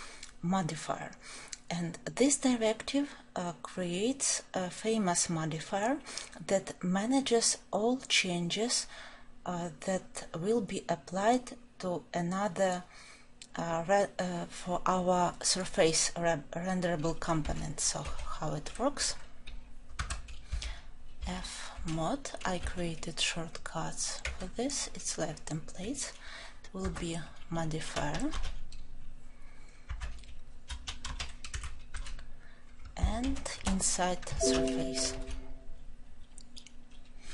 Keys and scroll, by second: 20.0 Tab, 24.3 Return, 26.9 Tab, 29.8 Tab, 35.1 ctrl+alt+l.